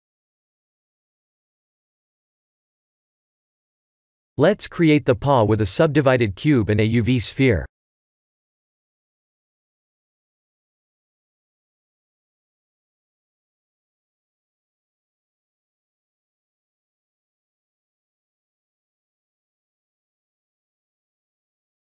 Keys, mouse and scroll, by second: 0.0 scroll down 1, 0.4 click, 1.6 scroll down 6, 2.6 click, 2.6-3.4 scroll down 1, 6.2 shift+a, 10.5-10.9 scroll down 4, 10.9 ctrl+3, 11.4-11.9 scroll up 5, 11.9 shift+middle click, 12.6 Tab, 13.9 scroll down 1, 14.5 ctrl+r, 17.0 middle click, 17.5 3, 18.2 shift+z, 19.8 shift+z, 21.0 3, 21.5 click.